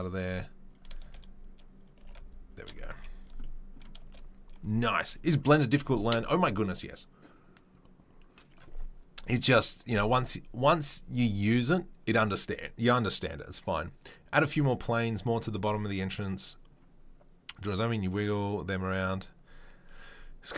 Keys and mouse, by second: 1.0 s, 2.0 g, 2.9 z.